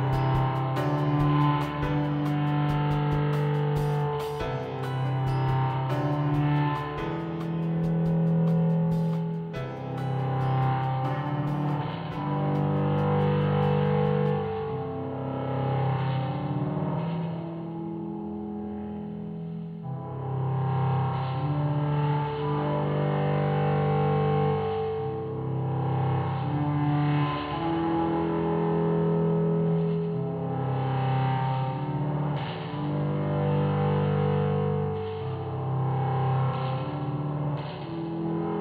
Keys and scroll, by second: 23.7 ctrl+z, 28.9 Delete, 32.8 Up, 33.3 Left, 33.5 Up, 33.9 shift+Down.